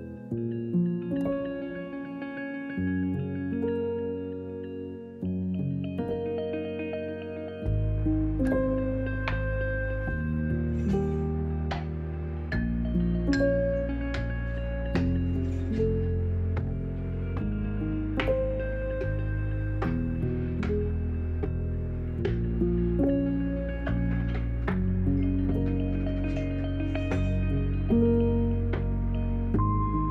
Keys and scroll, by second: 20.4 b.